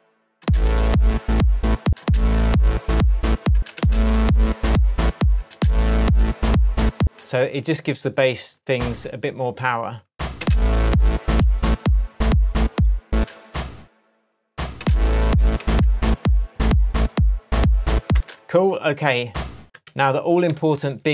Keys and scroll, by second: 0.4 space, 1.8 space, 3.5 space, 5.3 space, 6.9 space, 10.4 space, 13.1 space, 14.7 space, 15.5 shift+Tab, 18.1 space, 19.8 super+d.